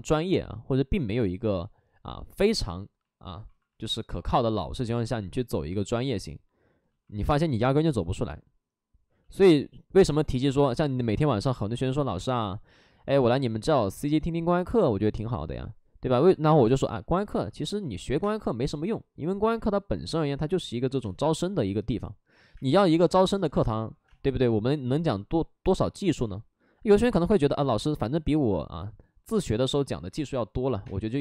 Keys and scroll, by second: 4.0 w, 17.1 ctrl+d, 17.3 ctrl+d, 17.8-18.6 typing, 20.9 space, 24.4 space, 26.0 space, 29.3 space, 30.7 space.